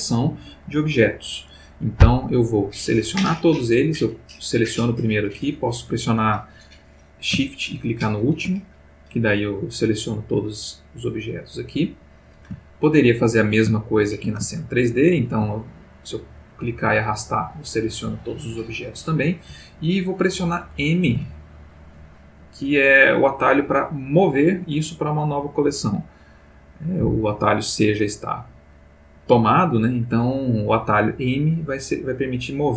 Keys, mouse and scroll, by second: 4.4 click, 7.9 shift+click, 9.9-11.4 middle drag, 12.6-13.1 ctrl+middle drag, 13.7-14.4 ctrl+shift+middle drag, 14.5-15.4 ctrl+shift+middle drag, 16.0-17.1 drag, 21.1 m.